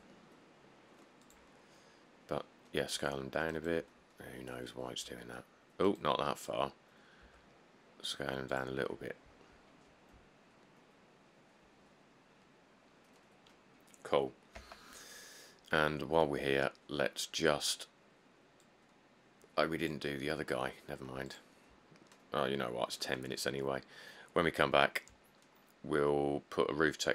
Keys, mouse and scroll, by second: 0.0 Tab, 3.0 s, 4.5 scroll down 5, 5.1 scroll, 5.1 s, 6.7 scroll, 7.5 s, 14.8 Tab, 23.8-24.4 scroll, 24.6 middle click, 24.7 middle click, 25.5 middle click, 25.8 middle click, 26.1 middle click.